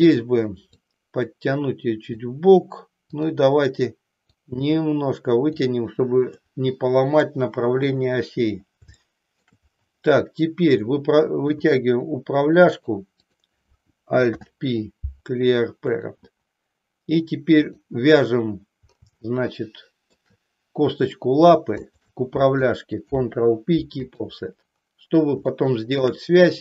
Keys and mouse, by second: 0.7-2.1 drag, 3.1 click, 4.3-5.6 drag, 6.5 middle click, 7.9 KP_3, 9.0 shift+middle click, 10.9 click, 11.6 e, 13.2 click, 14.5 alt+p, 17.6 click, 19.2-20.2 shift+middle drag, 21.8 shift+click, 22.9 ctrl+p, 25.6 shift+middle click.